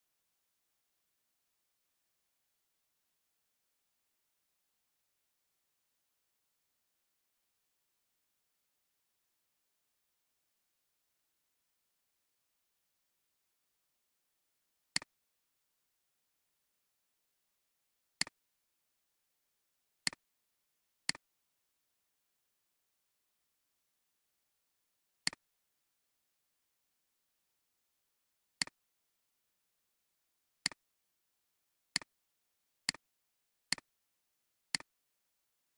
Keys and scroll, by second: 22.6 w.